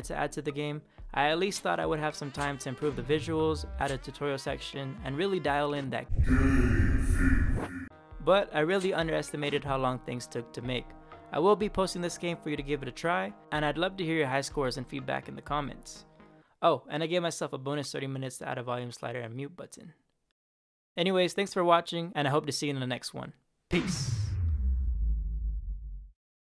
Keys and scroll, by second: 0.0-3.7 typing, 4.2 Right, 5.6 Down, 5.7 space, 8.6 Up, 9.3 Down, 9.5 Return.